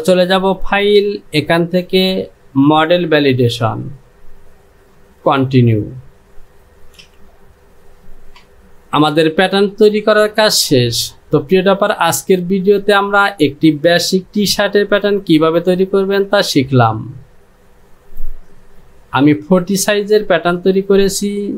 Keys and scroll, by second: 7.0 j.